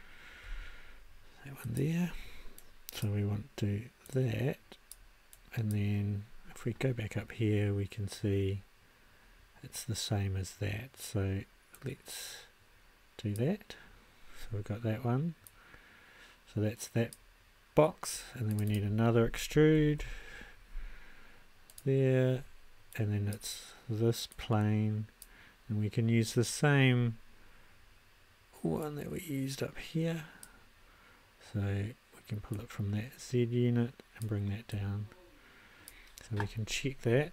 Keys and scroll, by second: 19.3-20.5 typing.